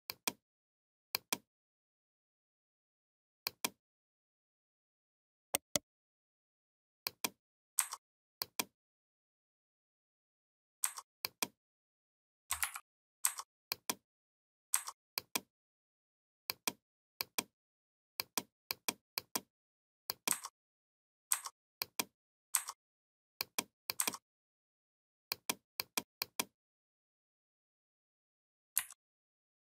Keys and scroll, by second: 12.4 ctrl+z, 28.6 Left.